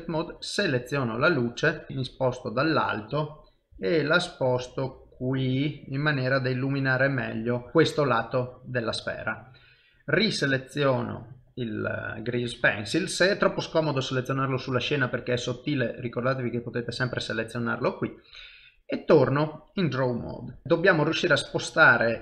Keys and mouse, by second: 0.2 click, 0.6 middle click, 2.1 KP_7, 3.7 g, 5.8 middle click, 7.7 shift+middle click, 7.9 middle click, 8.5 shift+middle click, 10.7 click, 16.0 click, 18.2 ctrl+Tab, 20.6 ctrl+z, 20.6 click.